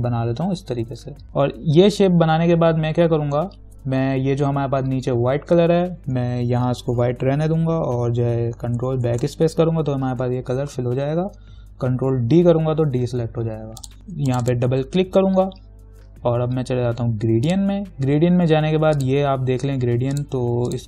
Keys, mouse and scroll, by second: 12.6 ctrl+d, 14.0 click, 14.5 click, 17.7-20.8 drag.